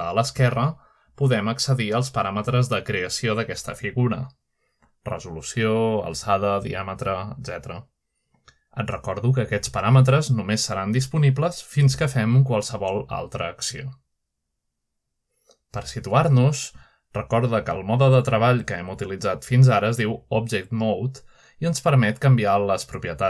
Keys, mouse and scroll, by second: 1.0 click, 3.4-5.6 drag, 6.9-8.1 drag, 8.7-11.1 drag, 12.7 shift+middle drag, 13.3-13.7 shift+middle drag, 14.0 shift+middle click, 15.6-16.4 middle drag, 16.4-17.1 drag, 20.7 click.